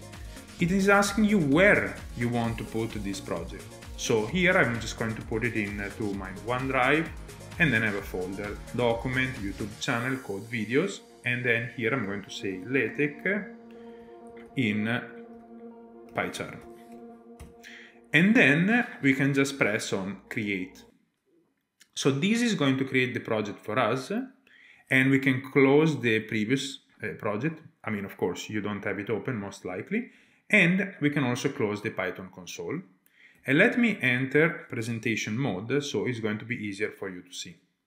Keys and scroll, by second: 12.1 typing, 17.0-17.4 typing, 33.6 shift+super+a, 35.0 Return.